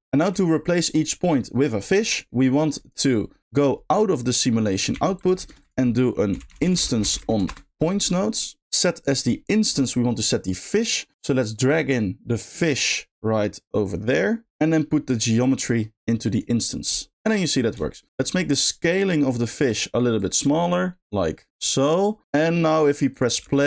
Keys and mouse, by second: 0.3 middle click, 1.0 middle click, 2.2 middle click, 2.8 drag, 3.4-5.4 drag, 11.7 click, 15.0-16.4 drag, 17.2 middle click, 19.5 middle click, 20.1-22.2 drag, 23.1 click, 23.4 space.